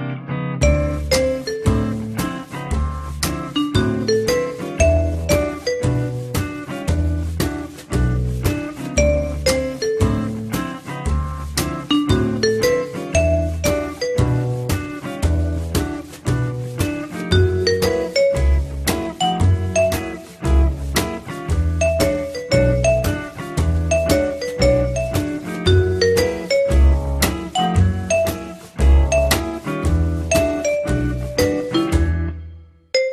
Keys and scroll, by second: 8.6 l, 30.2-31.1 typing, 31.2 Return.